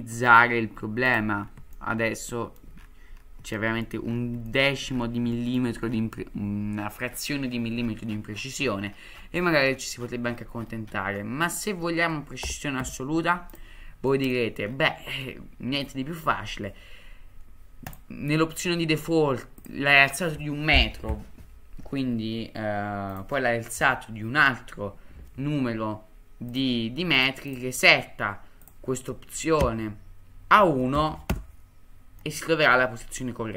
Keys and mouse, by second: 1.7-2.6 shift+middle drag, 3.5-3.8 shift+middle drag, 4.5 shift+middle click, 5.3 shift+middle drag, 11.2-11.6 middle drag, 12.4 g, 14.1 middle drag, 15.2-15.8 middle drag, 17.8-26.5 drag, 27.1-31.9 drag, 32.2-33.5 middle drag.